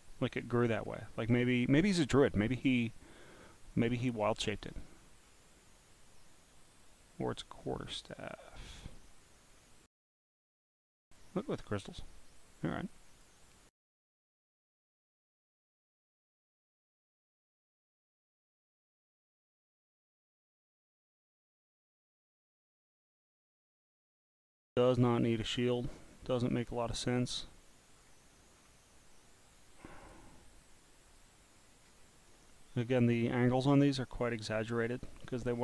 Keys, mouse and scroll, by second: 0.4 scroll, 0.4 scroll, 0.5 scroll, 0.8 scroll, 0.9 scroll, 1.4 scroll up 1, 1.5 scroll, 2.4 scroll down 2, 3.8-4.6 scroll down 5, 5.2-5.6 scroll down 1, 6.7 click, 7.4 click, 8.6 scroll down 4, 9.5 scroll down 1, 9.6 scroll down 1, 9.6 scroll down 1, 10.2 scroll down 1, 10.3 scroll, 10.3 scroll down 1, 10.8 scroll down 1, 11.4 scroll down 1, 12.3 click, 12.9 click, 14.8 click, 16.2-17.3 scroll down 3, 17.3-17.7 scroll down 1, 18.8 scroll up 3, 19.4-20.4 scroll up 3, 20.9 scroll up 2, 21.5 scroll down 1, 24.4 scroll down 4, 25.1-26.3 scroll up 9, 26.6 scroll down 1, 28.0-28.5 scroll down 1, 28.5-29.1 scroll down 1, 30.0 click, 30.6 click, 31.5-32.0 scroll, 32.3 click, 33.9 click, 34.4 click, 35.5-35.6 scroll down 3.